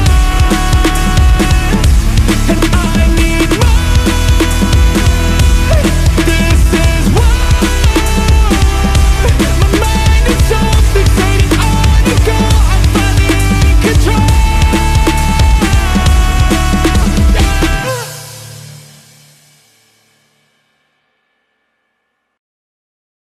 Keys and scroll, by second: 14.0 x, 14.7 x, 16.0 x, 20.5 x.